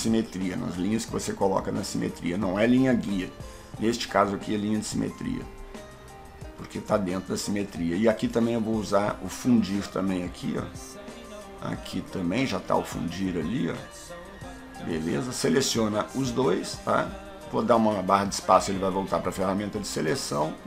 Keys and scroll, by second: 17.6 space.